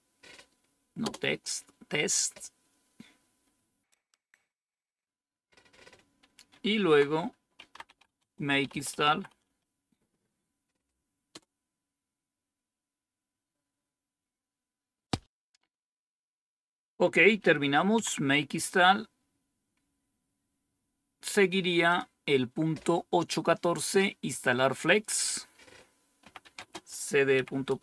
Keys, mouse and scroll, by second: 0.9 Return, 6.8 Down, 7.2-9.9 typing, 11.2 Return, 17.9 Down, 19.1-20.8 scroll down 1, 20.8-21.8 scroll down 1, 21.8 click, 26.1-27.4 typing, 27.6 Return.